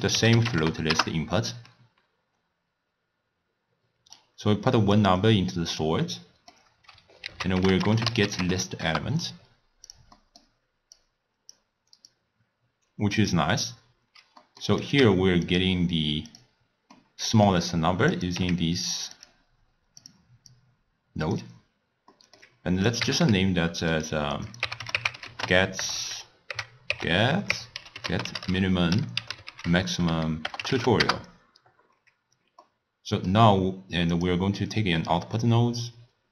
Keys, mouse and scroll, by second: 4.2-5.3 drag, 6.1-7.2 middle drag, 7.2 ctrl+a, 10.2-11.0 middle drag, 11.0 click, 12.1 click, 14.5 middle click, 14.8 click, 15.0 w, 17.0-18.2 middle drag, 18.2 click, 18.4 w, 20.5 drag, 22.1-22.9 middle drag, 22.9 click, 23.2 s, 24.5-26.0 drag, 26.0 BackSpace, 26.1 BackSpace, 32.7-34.2 middle drag, 34.2-36.3 drag.